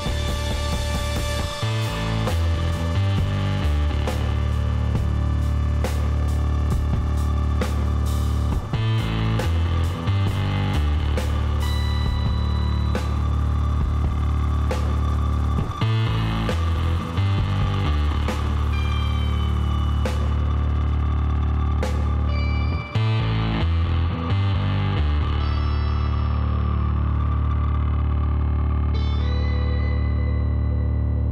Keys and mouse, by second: 2.7-7.6 middle drag, 3.2 Tab, 4.2 a, 10.3 KP_Divide, 10.9-14.9 middle drag, 14.9 click, 15.0 m, 17.8 click, 18.2-19.6 middle drag, 18.8 a, 21.5 Tab, 21.7 middle click, 24.7-28.5 drag, 29.2-31.3 middle drag.